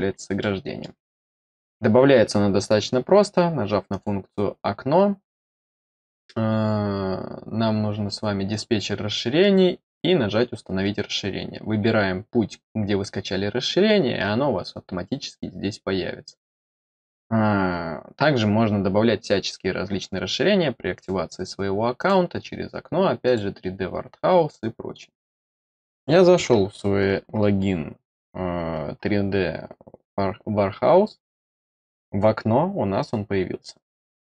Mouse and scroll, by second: 0.3-0.8 middle drag, 3.8 click, 8.4 click, 20.9 click, 21.9 click, 23.2 click, 31.3 click.